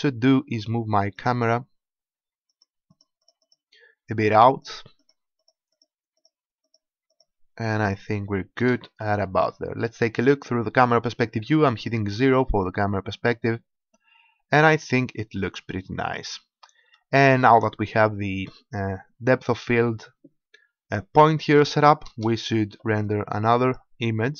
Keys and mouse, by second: 1.1-8.7 drag, 8.5 KP_0, 13.1-16.4 middle drag, 22.1 KP_0, 23.6 click.